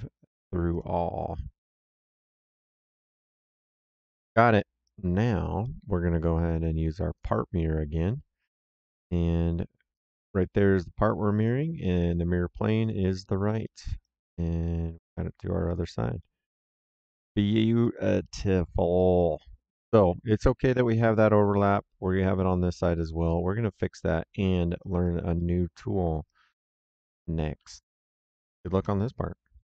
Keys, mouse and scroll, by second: 0.6 click, 3.1 click, 4.7 right click, 5.5 middle click, 7.1 click, 9.8 click, 11.3 click, 11.7 middle click, 12.7 click, 13.5 middle click, 13.9 right click, 15.6 click, 16.1 middle click, 16.6 right click, 17.7 middle click, 18.6 right click, 19.6 middle click, 21.6 right click, 22.8 middle click, 23.2 right click, 24.0 middle click, 24.4 right click, 25.3 middle click, 25.7 right click, 26.4 middle click.